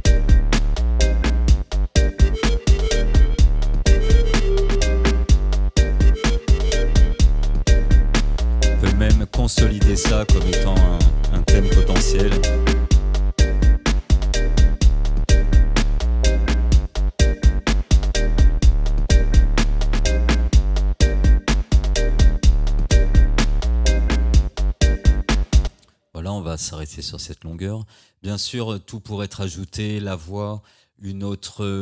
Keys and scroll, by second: 12.5 ctrl+j, 25.7 space.